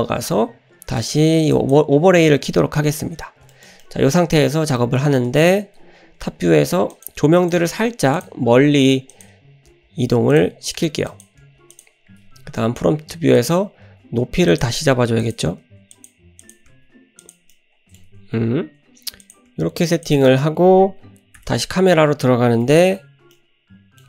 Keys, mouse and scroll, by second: 1.5 click, 3.5 shift+middle click, 3.5 scroll up 1, 3.8-4.2 middle drag, 3.8-4.2 scroll down 1, 4.8 shift+middle drag, 4.8 scroll up 1, 5.4-5.8 scroll down 1, 6.4 scroll up 1, 6.9 click, 7.4 click, 9.1 click, 9.4-9.7 scroll down 1, 9.7 g, 11.1 click, 11.5 g, 12.7-13.4 scroll up 1, 13.4 click, 13.4 scroll up 1, 13.9 r, 15.2 click, 15.6 r, 16.4 click, 16.7 r, 17.5 scroll down 1, 17.5-18.0 middle drag, 18.1 scroll down 1, 18.2 `, 18.5-19.2 scroll up 1, 19.2 click, 20.3 shift+middle click, 21.4 KP_0, 22.9 KP_0, 23.1-24.0 scroll down 2, 23.4-24.0 middle drag.